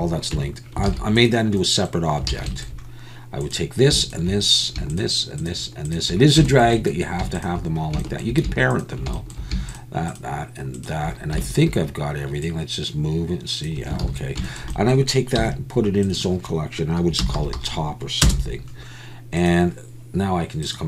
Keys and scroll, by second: 0.3 Tab, 0.9 alt+a, 2.3 alt+a, 14.0 ctrl+z, 15.4 m.